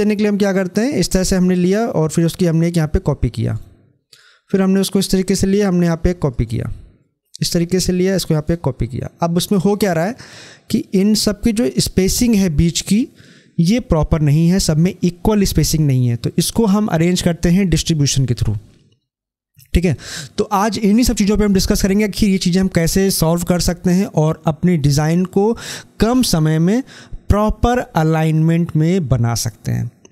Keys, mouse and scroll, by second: 3.4 right click, 4.0-6.2 drag, 6.2 right click, 6.8 click, 8.3 right click.